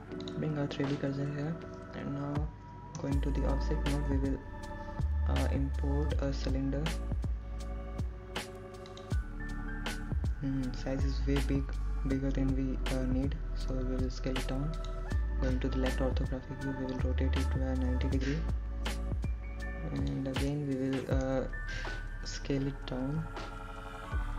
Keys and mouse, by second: 2.1 shift+s, 6.0 Tab, 9.1 shift+a, 16.7 s, 17.8 click, 18.6 KP_3, 20.1 r, 20.9 KP_9, 21.1 KP_0, 23.1 click, 23.5 middle click.